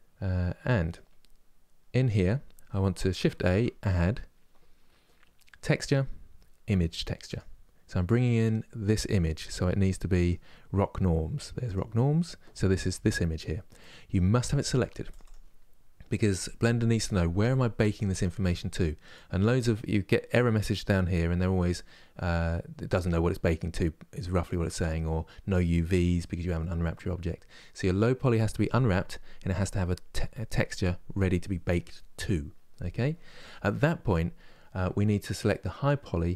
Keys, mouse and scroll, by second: 14.9-34.3 drag.